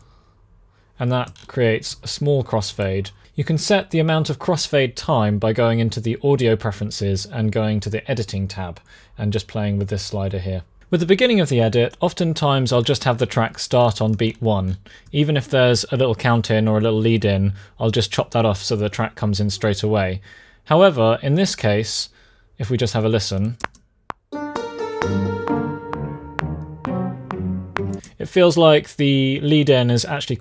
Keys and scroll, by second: 3.1 space, 23.3 space, 27.6 space.